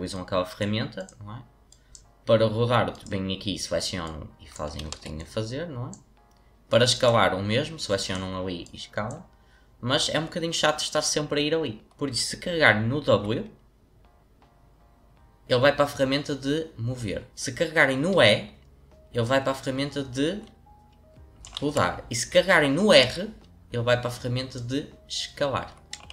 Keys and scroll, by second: 4.8 ctrl+z, 13.0 w, 18.1 e, 21.5 ctrl+z, 23.0 r.